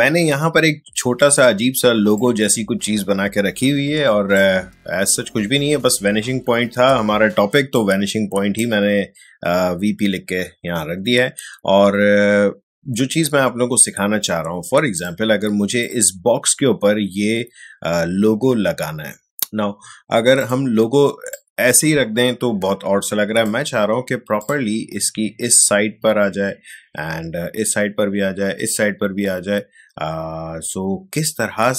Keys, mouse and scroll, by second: 2.1-7.7 drag, 7.7-15.0 drag, 20.4-24.4 drag.